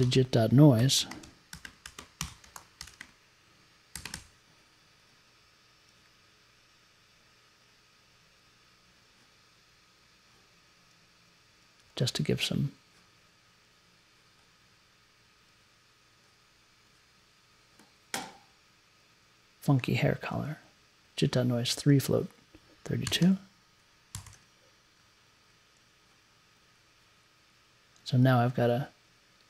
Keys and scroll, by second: 0.0-4.1 typing, 22.8-24.3 typing.